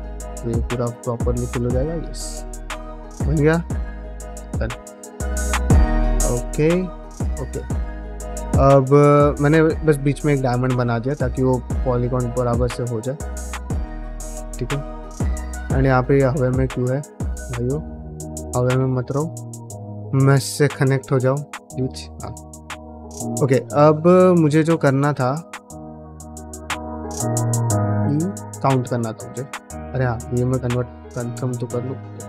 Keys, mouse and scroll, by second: 0.0-3.1 typing, 0.0 middle click, 0.7 middle click, 1.9 click, 2.4 middle click, 2.9 click, 3.4 middle click, 4.2 click, 4.4 g, 4.8 click, 5.4 click, 5.4 g, 5.8 middle click, 6.9 click, 7.1 g, 7.5 click, 8.1 middle click, 8.4 middle click, 8.7 middle click, 9.3 click, 9.5 g, 10.2 middle click, 11.6 middle click, 11.9 shift+middle click, 12.3 middle click, 12.6 shift+middle click, 13.7 middle click, 14.0 ctrl+middle click, 14.8 ctrl+middle click, 15.0 ctrl+middle click, 15.3 middle click, 15.9 click, 16.1 middle click, 16.3-18.8 typing, 16.8 click, 18.0 click, 18.7 click, 19.3 click, 19.7 middle click, 20.0 click, 20.6 click, 20.6 g, 20.9 middle click, 21.3 middle click, 22.3 ctrl+middle click, 22.7 middle click, 23.6 shift+middle click, 23.9 middle click, 24.5 click, 24.7 g, 25.3 click, 25.4 g, 25.9 ctrl+middle click, 26.2 middle click, 26.5 click, 26.7 g, 27.2 shift+middle click, 27.4 middle click, 27.8 shift+middle click, 28.1 middle click, 28.5 middle click, 29.1 click, 29.6 f, 30.1 middle click, 30.4 click, 30.6 middle click, 30.9 f, 31.6 click, 31.8 f.